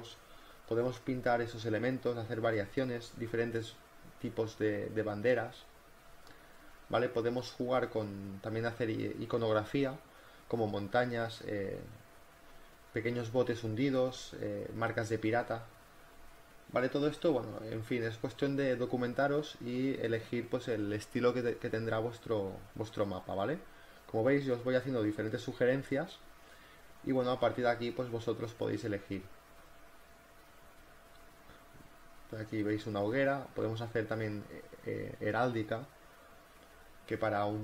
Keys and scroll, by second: 0.7 ctrl+alt+z, 1.0 ctrl+alt+z, 1.8-3.2 typing, 6.6 ctrl+z, 8.6 [, 8.8 ], 11.3 ctrl+alt+z, 12.4-13.3 typing, 18.8 ctrl+t, 19.1-21.3 typing, 20.2 ctrl+z, 20.6 ctrl+z, 21.0 ctrl+z, 21.2 ctrl+z, 23.2 ], 23.4 [, 23.6 ctrl+z, 23.7 [, 24.7 ], 25.2 b, 26.7-30.0 typing, 31.9 ctrl+t, 32.3 Return, 32.4 space, 32.5 b.